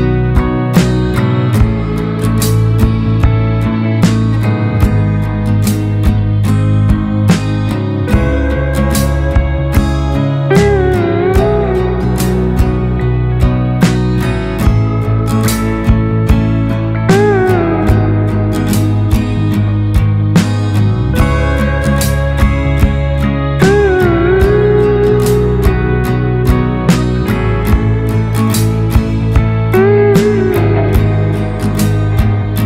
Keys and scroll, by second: 27.5 ctrl+y, 31.1 ctrl+y.